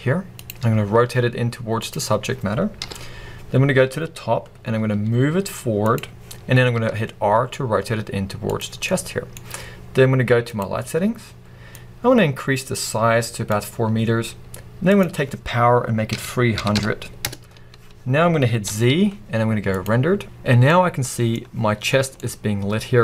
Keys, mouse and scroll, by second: 0.5 click, 0.7 r, 1.9 click, 2.8 KP_7, 3.4-4.8 scroll down 1, 4.8 g, 5.9 click, 6.8 r, 8.6 click, 8.9-11.9 middle drag, 11.9-20.8 drag, 17.3 0, 17.3 Return, 18.2-20.2 scroll up 2, 20.4-20.8 scroll up 2, 20.8-23.0 middle drag.